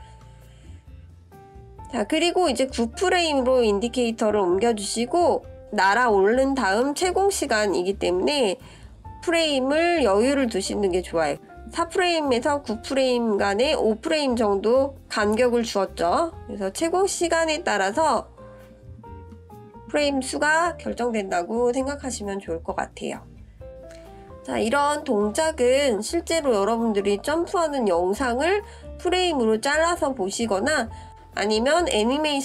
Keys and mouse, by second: 6.0-8.6 drag, 13.3-14.0 drag, 16.3-18.2 drag, 18.9-19.3 shift+middle drag, 21.5-23.4 drag, 25.4-25.8 shift+middle drag, 26.3-27.4 middle drag, 29.0 click.